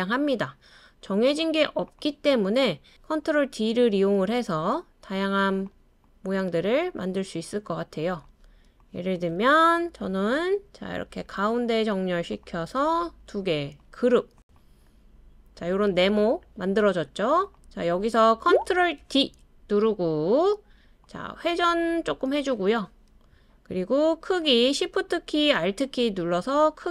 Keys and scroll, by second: 2.3 super+d, 11.1 i, 19.0 super+d.